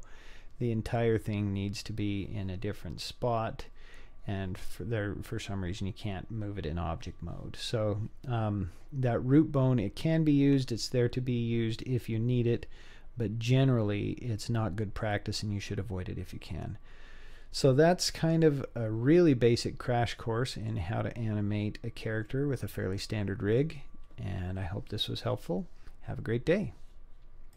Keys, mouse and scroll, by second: 17.8 middle click, 18.9-19.5 scroll up 3, 19.5-20.5 scroll down 3, 20.1-20.7 middle drag, 21.3-21.8 scroll up 2, 22.3-23.6 middle drag.